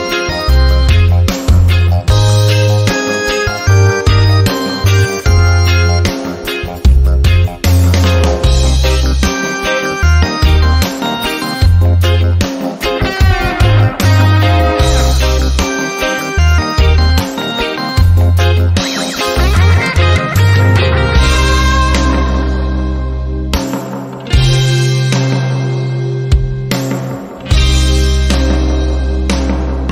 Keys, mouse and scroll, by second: 11.4-16.3 typing, 13.0 Tab, 17.2 click, 18.1 shift+click, 19.5 click, 21.1 ctrl+scroll up 1, 23.0 r, 23.7-24.9 drag, 26.0 ctrl+alt+c, 26.1 click, 26.5 ctrl+alt+v, 27.1 ctrl+scroll up 1, 28.2-29.9 drag.